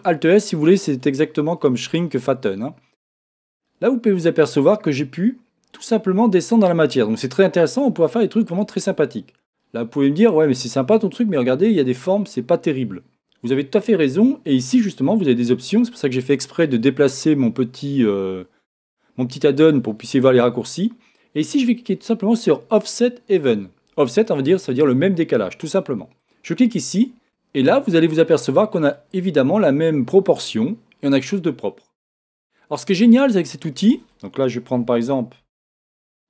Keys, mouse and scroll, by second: 1.0 click, 3.7-15.0 middle drag, 8.6-9.6 scroll up 1, 13.5-15.0 scroll up 1, 15.0-19.4 drag, 26.2 click, 27.1-36.2 middle drag, 33.0 scroll up 1, 33.2-33.7 scroll down 1, 34.8 Tab, 35.4 shift+Tab.